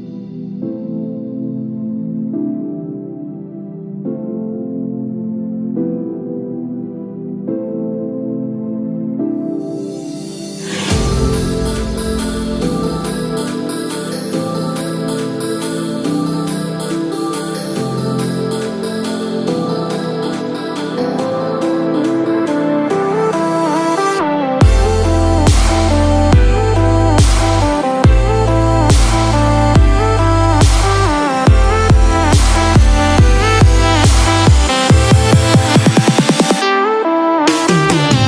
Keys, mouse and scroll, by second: 1.2 g, 3.0 g, 7.4 Tab, 8.1 click, 10.0 Tab, 10.6 ctrl+r, 13.7 alt+click, 15.1 g, 19.2 alt+click, 21.4 g, 26.2 click, 27.9 Tab, 28.1 click, 30.0 Tab, 31.6 ctrl+r, 35.0 alt+click, 36.9 g.